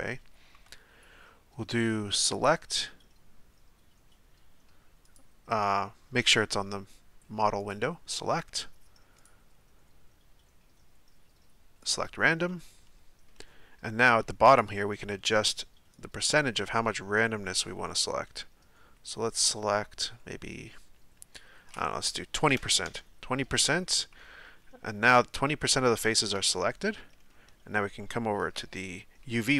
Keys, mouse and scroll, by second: 11.9-12.5 drag, 12.5-16.2 middle drag, 16.2-18.9 drag, 22.9-25.1 drag, 25.1-29.5 middle drag.